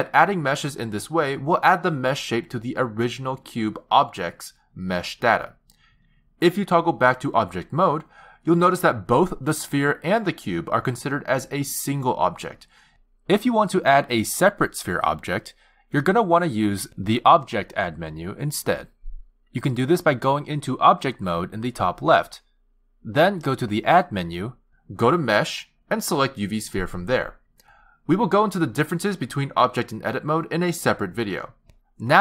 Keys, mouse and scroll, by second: 2.1 click, 6.4 click, 10.5 click, 11.3 click, 12.1 click, 13.7 click, 14.5 click, 16.5 click, 19.9 click, 23.9 click, 28.7 g.